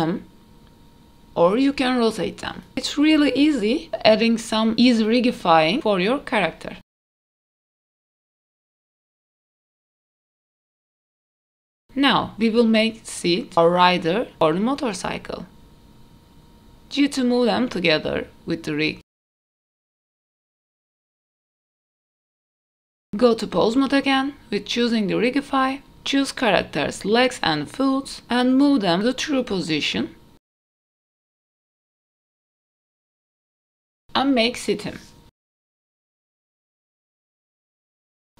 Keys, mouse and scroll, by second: 2.0 shift+middle drag, 2.5 middle drag, 3.3 click, 3.7-4.3 scroll up 3, 4.1 shift+middle click, 5.1 g, 7.7 KP_3, 8.5 g, 9.5 click, 9.9 g, 10.5 r, 10.9 g, 11.3 ctrl+z, 11.4 ctrl+z, 11.5 ctrl+z, 11.7 middle click, 11.8 click, 12.9 click, 13.4-13.8 scroll down 2, 13.8-14.3 middle drag, 15.7 click, 16.4 click, 17.9 g, 19.7 middle click, 20.2 g, 20.8 middle click, 21.7 Tab, 21.9 middle click, 22.1 Tab, 22.4 click, 23.5 Tab, 23.5 click, 23.5 middle click, 24.2 scroll up 2, 24.7 shift+middle click, 25.0 middle click, 26.5 click, 27.0 middle click, 27.9 g, 30.5 middle click, 31.1 click, 31.3 scroll down 1, 31.5 middle click, 31.7 g, 32.5 middle click, 33.0 middle click, 33.1 middle click, 33.3 KP_3, 33.5 click, 33.6 g, 35.0 scroll down 1, 35.1 shift+middle click, 35.9 click, 36.4 g, 38.3 r.